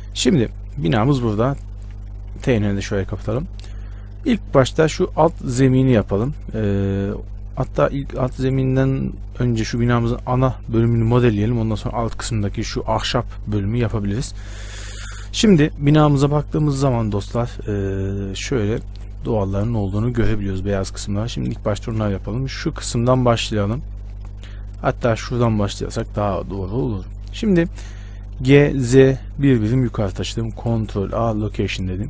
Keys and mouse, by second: 1.3-2.5 middle drag, 2.5 t, 21.9 shift+space, 28.6 g, 31.2 ctrl+a.